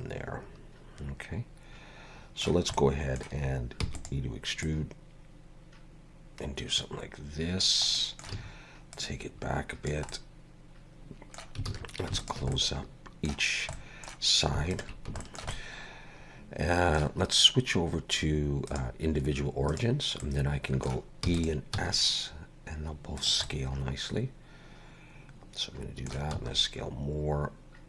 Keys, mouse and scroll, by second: 2.8 middle click, 3.8 e, 4.7 click, 8.0 middle click, 8.4 a, 9.0 click, 10.1 middle click, 11.7 alt+a, 12.2 alt+shift+click, 12.6 middle click, 13.8 middle click, 14.7 alt+shift+click, 15.2 shift+middle click, 15.6 middle click, 18.7 click, 20.2 middle click, 21.3 e, 21.8 s, 23.5 middle click, 26.4 s.